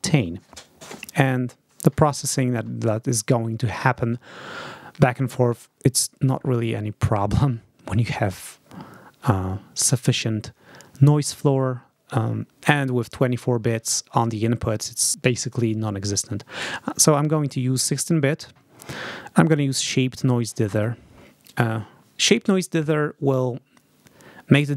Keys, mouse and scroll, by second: 15.4 click, 19.4 click.